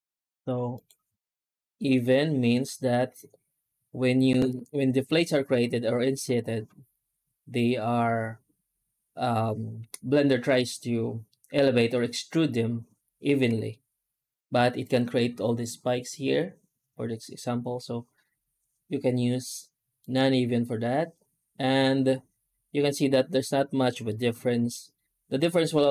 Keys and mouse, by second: 13.3 F9, 17.2 F9, 23.9-24.6 middle drag, 25.2 F9.